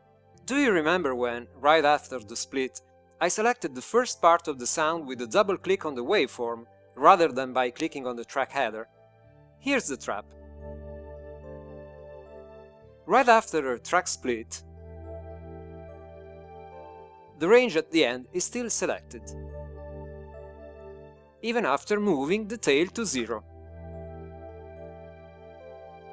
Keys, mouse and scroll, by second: 16.8 ctrl+alt+i, 24.7 click.